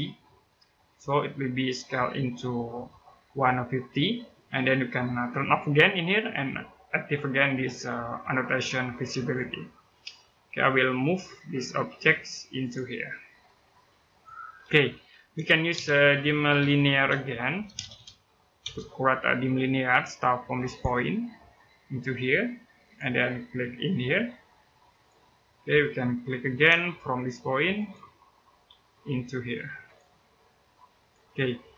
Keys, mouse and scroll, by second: 0.3 click, 1.6-2.7 scroll down 1, 2.7 middle click, 5.9 click, 9.0 click, 10.3 scroll up 1, 10.8 click, 11.2 scroll up 1, 12.4 click, 14.3-14.7 scroll down 1, 14.7 Escape, 14.9 middle click, 15.3-18.4 typing, 18.9-20.4 scroll up 1, 20.4 click, 20.7 scroll down 1, 21.2 middle click, 21.5 scroll up 1, 22.6 click, 23.1 middle click, 24.7 click, 25.4-26.0 scroll down 1, 26.0 middle click, 26.5 space, 27.5 click, 27.9 scroll down 1, 28.1 middle click, 28.5 scroll up 1, 29.6 click, 31.2 middle click.